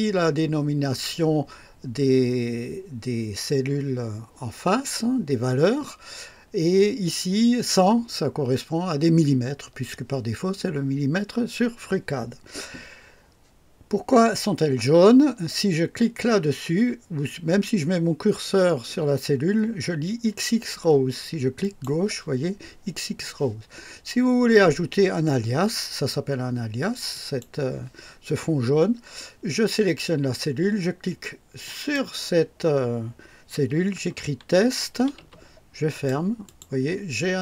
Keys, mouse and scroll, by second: 21.6 click, 27.1 click, 31.6 click, 34.0-35.7 typing, 35.9 click, 36.5 click.